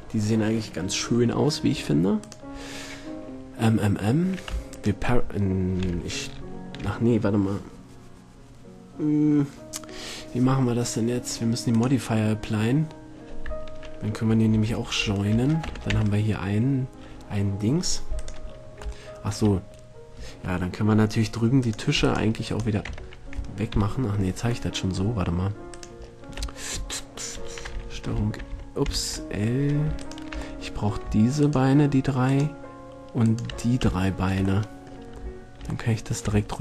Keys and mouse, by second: 1.3-2.4 middle drag, 2.4-4.3 right drag, 4.9 right click, 11.9-13.7 drag, 15.0 ctrl+j, 15.8 Tab, 16.1 Tab, 18.7-19.1 drag, 19.3 middle drag, 19.6 middle drag, 19.9 middle click, 20.3-21.8 middle drag, 21.8-22.2 drag, 23.1 Tab, 23.6 click, 23.9 KP_7, 25.9 middle click, 26.7 middle click, 28.3 l, 29.1 ctrl+l, 30.7-31.8 middle drag, 33.7 middle click, 34.2-35.3 middle drag.